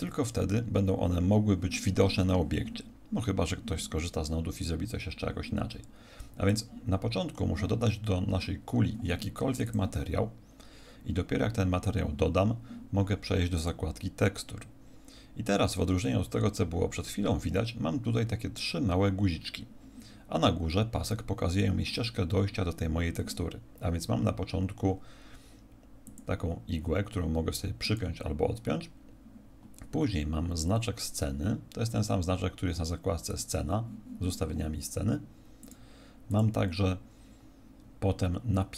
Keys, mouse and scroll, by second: 6.4 click, 9.6 click, 13.5 click, 26.0 click, 27.8 click, 33.2 click, 35.6 click, 36.2 click.